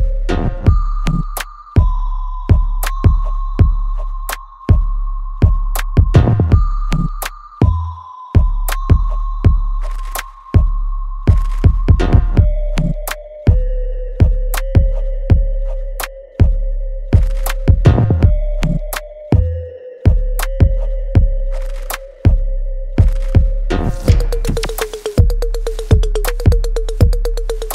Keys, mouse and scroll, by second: 7.2 click, 9.8-12.6 ctrl+drag, 12.6 click, 18.8 click.